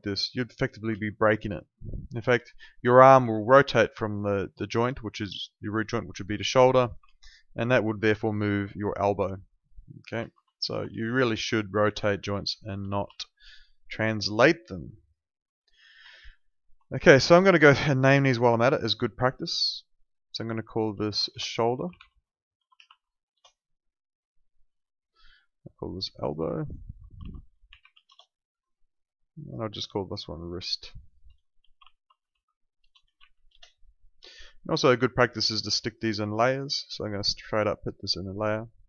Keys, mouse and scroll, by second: 1.1 ctrl+z, 1.4 alt+click, 3.2 e, 4.5 click, 7.1 z, 7.9 click, 10.1 ctrl+z, 10.6 alt+click, 10.9 w, 11.5 alt+click, 12.4 alt+click, 13.3 alt+middle click, 13.6 alt+right click, 13.9 alt+click, 14.1 alt+right click, 14.4 alt+middle click, 14.7 alt+right click, 14.9 alt+click, 15.1 alt+right click, 15.4 alt+middle click, 16.4 alt+middle click, 17.1 click, 21.0-23.3 typing, 25.0 click, 27.0-28.4 typing, 29.4 click, 31.3-33.7 typing, 35.5 click.